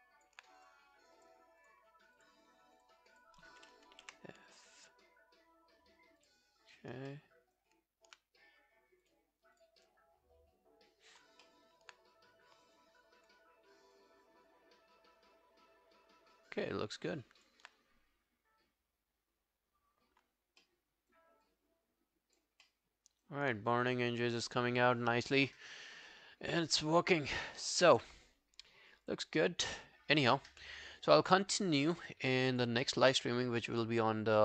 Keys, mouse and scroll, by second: 0.0 alt+click, 1.7 double click, 3.2 double click, 4.1 f, 5.0 scroll down 1, 7.1 alt+middle click, 11.5 alt+middle click, 12.8 alt+click, 14.0 alt+click, 18.1-18.7 scroll up 1, 18.7 scroll down 2, 20.6 scroll down 5, 20.7 alt+middle click, 21.5 alt+click, 22.7 alt+middle click.